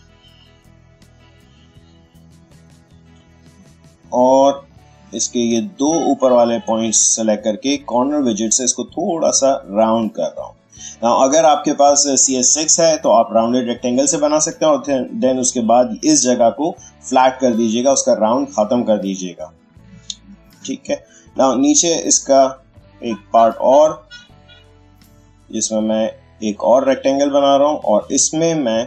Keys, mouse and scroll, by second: 8.3-10.7 drag, 18.9 space, 19.2 click, 19.4 space, 20.4 click, 20.5 space, 21.0 click, 21.1 space, 22.6-28.8 drag.